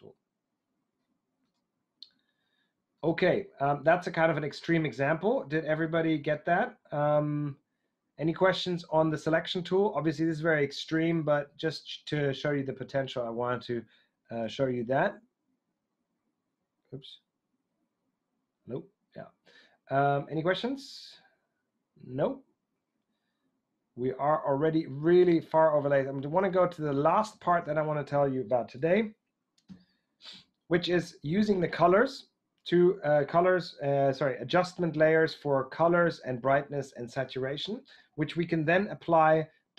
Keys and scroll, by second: 14.5 super+d, 26.3 super+Tab, 29.6 Right, 30.3 Right, 38.6 Right.